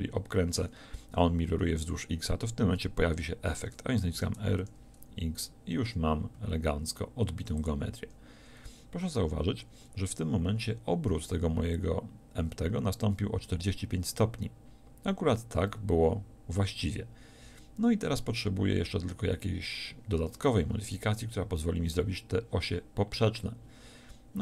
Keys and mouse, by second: 4.2 r.